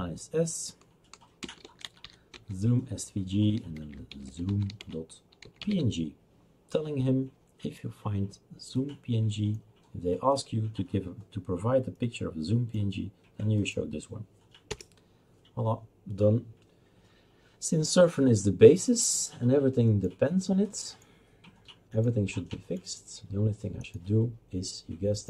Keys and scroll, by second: 0.0-0.2 typing, 1.4-2.5 typing, 3.5-6.2 typing, 14.7 Return.